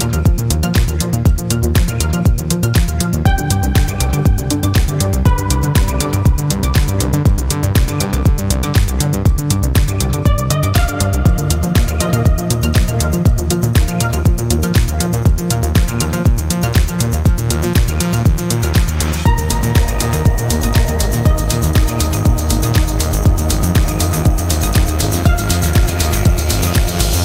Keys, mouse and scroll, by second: 1.9-3.5 drag, 3.8 click, 5.0 click, 6.3 click, 12.1 click, 12.7 click, 13.7 click, 16.0 click, 21.1 click, 22.2 click, 22.6-23.8 drag, 25.1 click, 25.8 click.